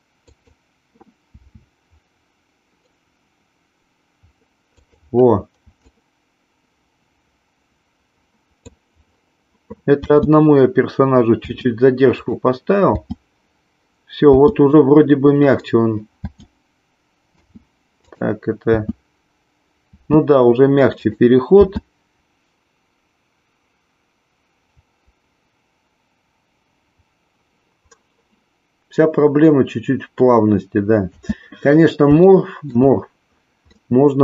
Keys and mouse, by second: 0.4 click, 1.3 s, 4.8 click, 5.9-8.7 drag, 9.9 space, 11.6 space, 12.2 click, 12.9 space, 14.3 space, 15.4 click, 16.2 space, 17.4 space, 18.0 click, 18.7 space, 20.0 space, 20.9 click, 21.5 space, 22.2 middle click, 31.1 space, 32.3-32.8 shift+middle drag, 33.8-34.2 middle drag.